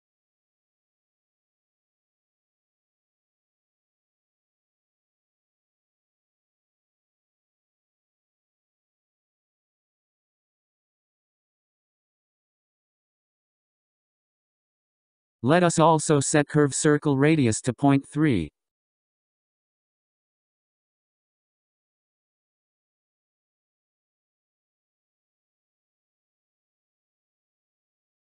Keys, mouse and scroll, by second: 3.7-4.6 scroll down 6, 4.6-6.6 scroll up 10, 6.6-9.6 drag, 13.2-15.1 scroll down 18, 15.1-15.8 scroll up 5, 15.9-17.4 scroll up 18, 17.4-19.1 scroll up 3, 19.1-22.3 drag, 24.4-25.9 scroll down 8, 26.5-28.3 scroll down 8.